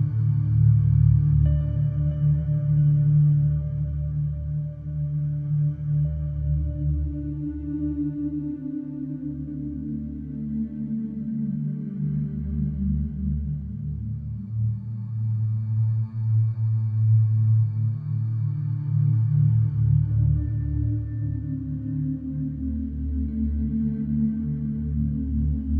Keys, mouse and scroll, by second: 2.4 click, 4.7-7.2 drag, 9.1-11.6 drag, 13.1-14.3 drag, 15.7 click, 20.6-24.6 drag, 25.3-25.7 drag.